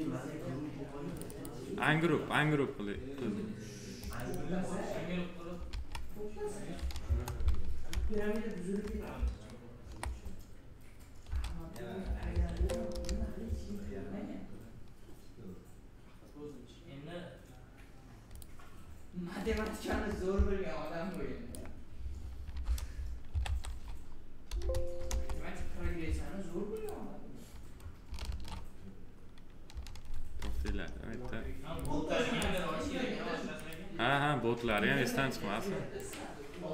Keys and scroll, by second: 5.6 ctrl+v, 7.0 F2, 9.1 BackSpace, 11.2 shift+d, 12.0 i, 12.8 Return, 19.8 F2, 22.6 shift+m, 23.2 e, 25.0 Return, 28.2 ctrl+z, 30.9 Delete.